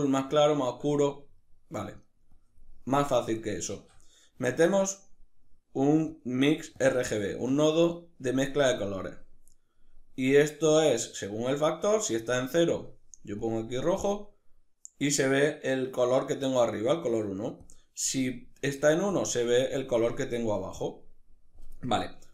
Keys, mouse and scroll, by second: 1.0-1.9 middle drag, 1.9 drag, 3.4 shift+a, 6.5 click, 6.8 ctrl+middle click, 7.6-12.4 drag, 17.2-18.8 drag, 21.4-22.3 middle drag.